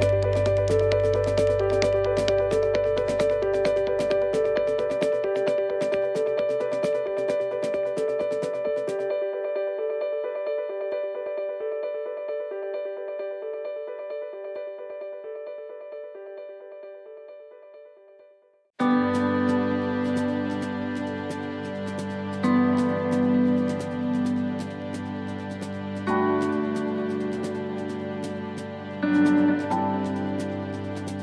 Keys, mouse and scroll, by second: 2.9 shift+middle click, 4.2 shift+middle click, 4.7 middle click, 5.5 click, 6.9 click, 10.7 middle click, 11.4 middle click, 12.4 s, 15.3 middle click, 17.1 click, 19.2 s, 21.4 click, 22.7 middle click, 23.3-23.7 scroll up 2, 23.7 middle click, 24.2-24.5 scroll up 1, 24.5 middle click, 25.6 middle click, 26.1-26.7 scroll down 4, 27.4 click, 28.1 middle click, 28.4 scroll down 2, 29.0 scroll up 2, 29.4 middle click, 29.6-30.0 scroll down 2, 30.1 shift+middle click.